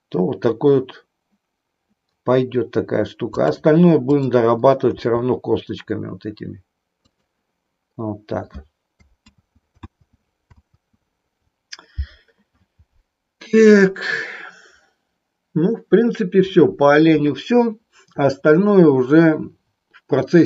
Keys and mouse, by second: 4.2 click, 5.0 r, 9.3 ctrl+z, 9.9 ctrl+z, 10.7 ctrl+z.